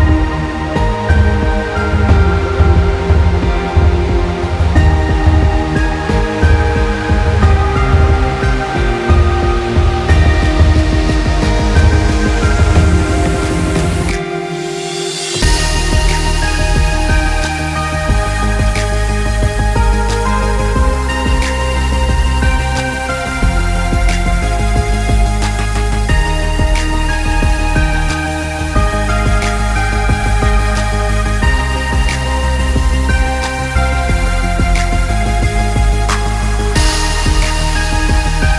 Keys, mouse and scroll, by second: 3.6 click, 5.2 click, 10.7 scroll up 1, 13.8-14.5 scroll down 1, 14.5-15.2 scroll up 1, 15.2 click, 16.2 KP_5, 16.4 KP_Enter, 17.6 click, 19.8 click, 23.3 KP_2, 23.5 Return, 24.5 click, 27.1 click, 29.2 click, 30.3 click, 31.4 click, 32.9 click, 35.2 click, 36.0 shift+click, 37.2 click.